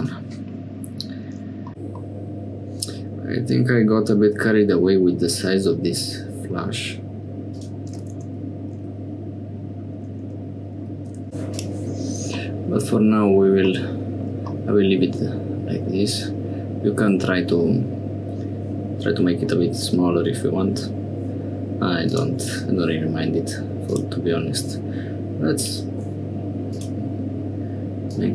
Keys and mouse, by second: 2.0-4.5 middle drag, 7.6 click, 9.4 Tab, 11.5 click, 12.4 click, 14.5-17.2 drag, 22.1 click, 23.9 click, 25.6 click, 26.7 click.